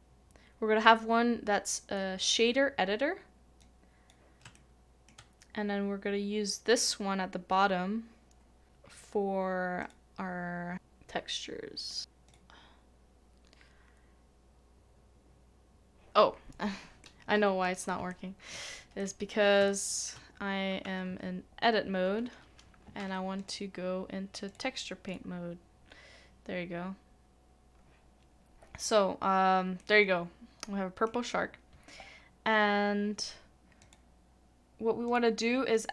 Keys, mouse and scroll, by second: 4.5 shift+middle click, 17.0 double click, 18.1 shift+middle click, 19.6 shift+middle click, 20.2 scroll down 1, 20.3 scroll up 1, 21.0 Tab, 29.8 Tab, 29.8 middle click.